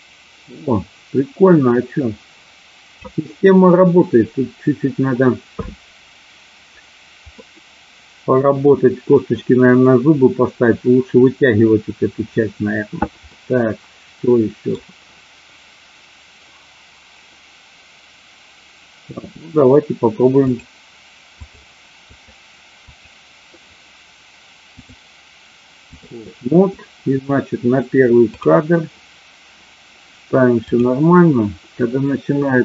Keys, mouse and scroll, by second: 7.3-8.6 middle drag, 13.2-14.7 middle drag, 19.3 click, 21.3 click, 21.9 click, 22.8 click, 24.8-26.0 drag, 28.2 click.